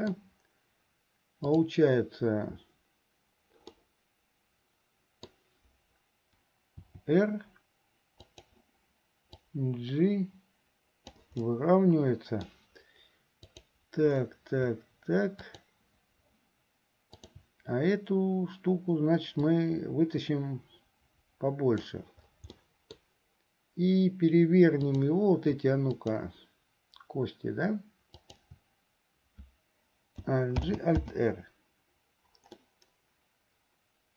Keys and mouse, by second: 1.4 click, 3.8-5.5 middle drag, 6.9 r, 9.5-12.7 drag, 15.5 shift+click, 17.2 shift+click, 19.5-22.2 drag, 22.8 click, 22.8 middle click, 22.8 right click, 24.9 click, 26.1 shift+click, 28.2 shift+right click, 30.7 alt+g, 31.2 alt+r, 32.7-34.1 middle drag.